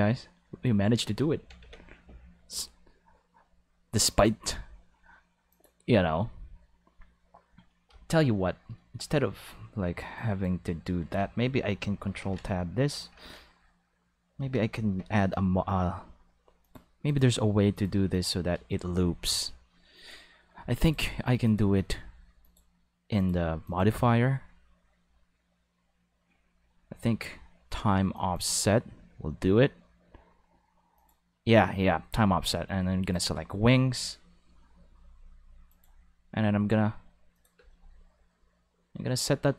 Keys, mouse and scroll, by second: 1.0 space, 1.6 ctrl+s, 4.1 click, 5.5 click, 10.2 click, 12.2 ctrl+Tab, 14.9 n, 16.6 click, 17.1 click, 17.8 click, 18.1 click, 20.8 click, 21.5 click, 22.4 click, 23.2 click, 23.7 click, 28.2 click, 31.0 click, 33.1 click, 35.7 click, 37.3 click, 37.6 space.